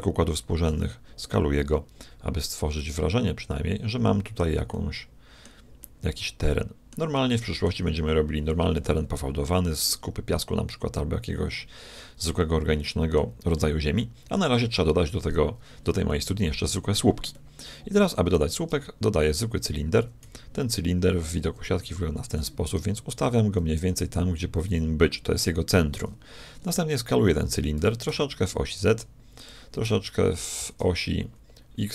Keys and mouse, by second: 0.7 s, 3.5-9.3 middle drag, 12.8-15.6 middle drag, 16.1-19.3 middle drag, 18.3 shift+a, 20.2 z, 21.7 KP_1, 22.9 g, 26.5-28.6 middle drag, 27.8 s, 29.9 s.